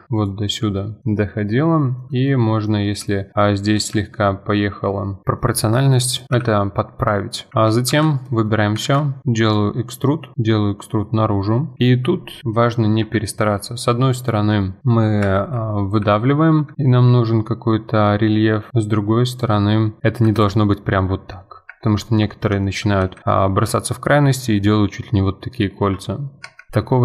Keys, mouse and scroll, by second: 1.0-2.8 middle drag, 2.8 scroll up 2, 3.1 shift+middle click, 3.7 s, 5.2-5.6 shift+middle drag, 5.6 scroll down 2, 5.9 click, 6.2 middle drag, 6.3 KP_1, 7.0 scroll up 2, 7.5 Tab, 8.2 middle click, 8.8 alt+e, 13.4 middle click, 13.7-14.3 scroll down 3, 14.3 middle click, 14.8 s, 15.9 KP_1, 16.7 s, 19.7 scroll up 2, 20.0 middle click, 20.2 s, 21.9-22.3 scroll down 2, 22.3 middle click, 23.0 s, 26.7 scroll up 4, 26.9 shift+middle click.